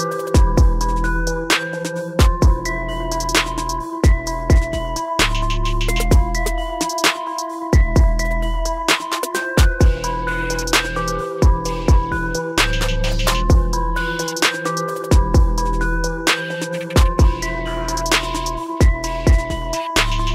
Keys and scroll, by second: 16.5 ctrl+-.